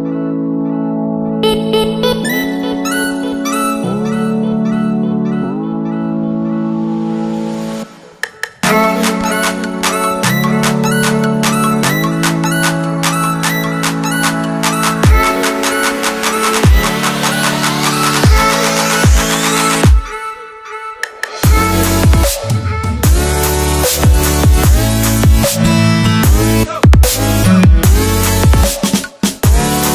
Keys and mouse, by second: 0.7-2.3 typing, 1.4 click, 7.7-8.7 typing, 8.5 click, 9.5 click, 9.7 typing, 10.4-11.3 drag, 11.1-11.8 typing, 12.7 click, 14.1 right click, 15.6 click, 16.8 click, 17.1 typing, 19.1-20.5 typing, 21.4-22.2 drag, 24.8 shift+a, 26.6 typing, 28.0-28.8 typing, 28.1 click.